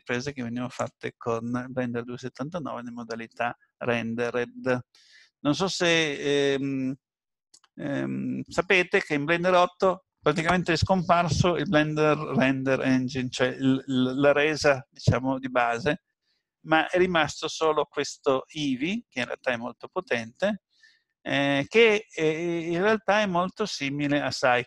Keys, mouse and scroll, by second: 22.6-23.1 scroll up 2, 23.1 scroll down 1, 23.2 scroll down 1, 24.5 shift+middle click.